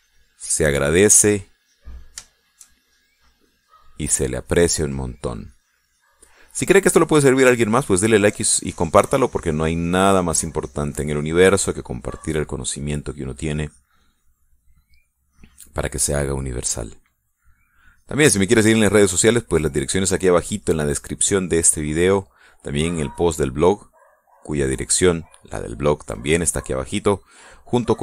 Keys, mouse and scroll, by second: 0.8 click, 1.7-2.8 drag, 2.9 click, 3.6 shift+middle click, 4.5 shift+middle click, 5.6-7.9 drag, 11.1 middle click, 12.0-15.9 drag, 16.3-18.2 drag, 18.3 middle click, 19.2-20.2 drag, 20.3-22.1 middle drag, 22.9-25.0 drag, 27.0-28.0 drag.